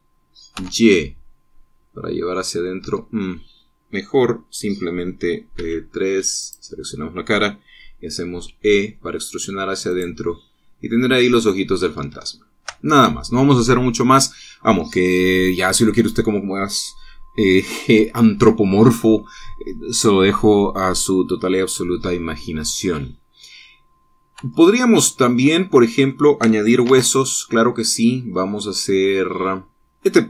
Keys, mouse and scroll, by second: 1.2 y, 3.5 Escape, 6.2 3, 7.1 click, 9.0 e, 10.6 click, 10.9-12.7 middle drag, 12.9 shift+middle click, 25.1 Tab, 25.6-27.0 middle drag, 27.5 shift+a.